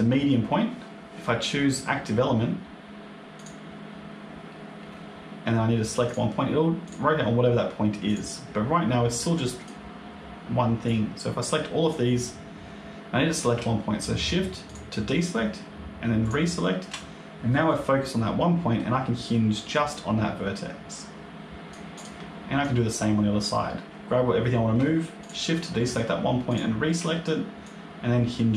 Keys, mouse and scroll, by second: 5.9 click, 6.7 click, 7.9 click, 9.0 click, 10.7 click, 14.5 shift+click, 16.1 shift+click, 17.6 middle click, 19.6 click, 21.8 click, 22.5 click, 25.1 shift+click, 26.4 shift+click, 27.5 click.